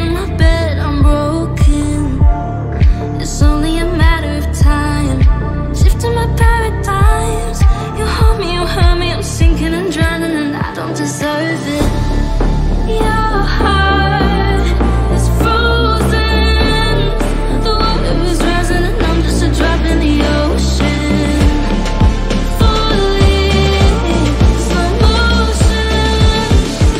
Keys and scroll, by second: 0.3 shift+F2, 21.0 Delete, 24.4 Delete, 25.0 F3, 25.8 Delete.